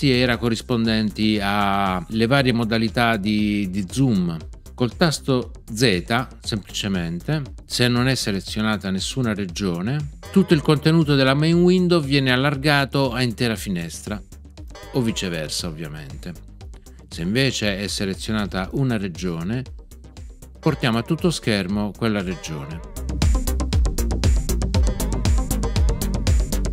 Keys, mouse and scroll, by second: 10.2 z, 14.7 z, 20.6 z.